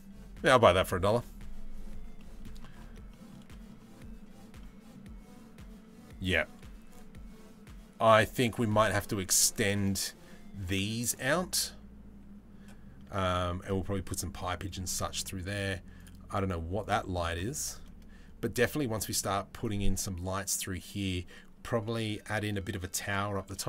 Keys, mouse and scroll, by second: 1.8 middle click, 2.7 shift+middle click, 3.1 middle click, 4.2 middle click, 15.6 click.